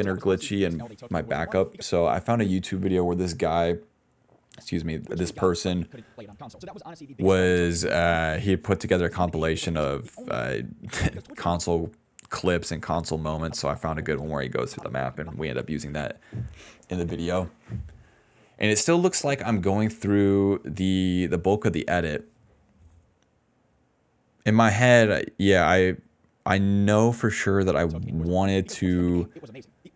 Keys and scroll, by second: 1.8 space, 3.7 s, 4.8 space, 5.4 d, 7.9 s, 8.3 space, 8.8 space, 9.3 s, 10.3-12.3 typing, 14.3 s, 17.5 s, 20.3 a, 21.8 d, 21.9 d, 24.0-26.2 typing, 27.8 space, 28.1 d, 29.5 d.